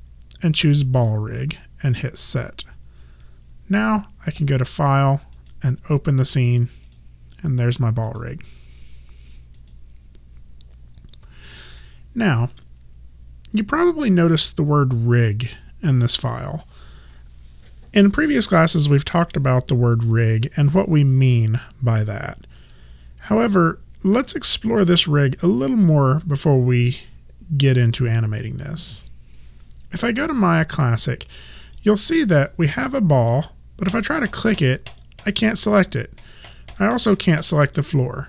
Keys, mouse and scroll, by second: 2.4 click, 27.9 click, 30.6 alt+click, 32.0 alt+right click, 33.9 click.